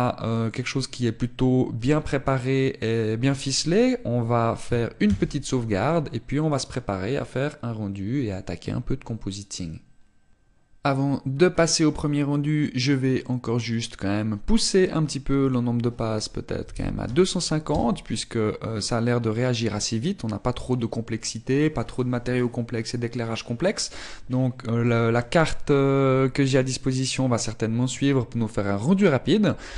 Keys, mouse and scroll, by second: 0.5 click, 1.7 click, 6.2 ctrl+s, 18.9 click, 18.9-19.6 scroll down 2.